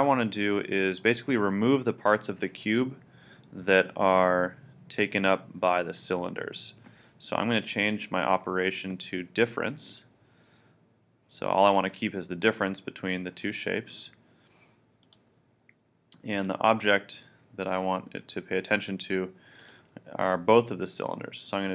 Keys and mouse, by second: 7.9-12.7 drag, 13.9-18.2 drag.